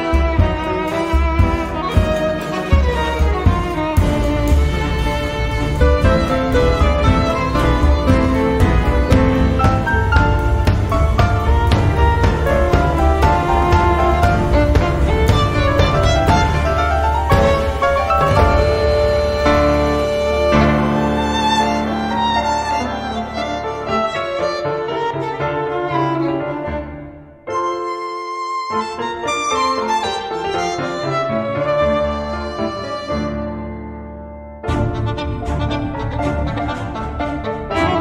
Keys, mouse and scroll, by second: 1.6 click, 4.3 click, 5.7 ctrl+click, 9.4 click, 12.8 click, 15.9-17.9 drag, 18.9 click, 19.3 space, 20.3 click, 20.8 space, 21.9 click, 22.6 space, 23.2-25.1 drag, 25.6 click, 26.1 space, 26.5 click, 27.5-29.3 drag, 29.9 click, 31.0 click, 31.7 space, 31.9 click, 32.5 click, 34.5 click, 36.3 right click.